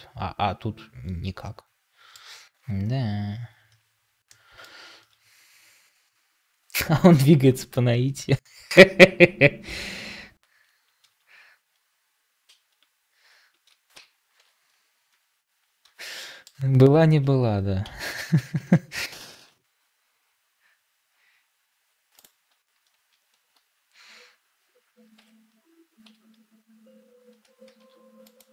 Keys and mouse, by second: 4.2 middle click, 13.8 ctrl+j, 16.1 middle click, 16.3 click, 19.3 shift+s, 25.1 Tab, 26.0 a, 27.6 shift+d.